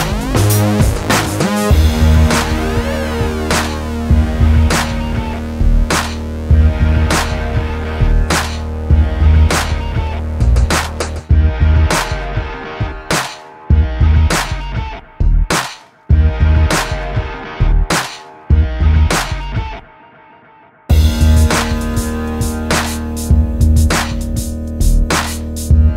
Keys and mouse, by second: 0.5 Tab, 1.3 Tab, 2.4 middle click, 2.7 j, 3.3 j, 3.9 j, 4.5 middle click, 5.1 j, 6.6-9.9 typing, 9.9 middle click, 10.5 middle click, 12.1 middle click, 15.8 middle click, 18.1 alt+s, 19.2 ctrl+shift+b, 20.0 KP_7, 20.8 ctrl+z, 21.4 i, 22.4 click, 23.2 alt+s, 25.1 i, 25.5 ctrl+z, 25.5 i.